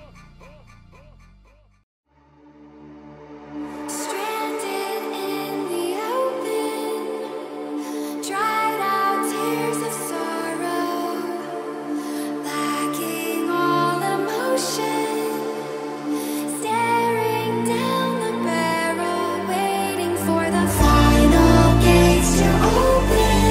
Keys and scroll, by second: 8.1 Delete, 14.1 Delete, 16.4 Delete, 19.3 Delete.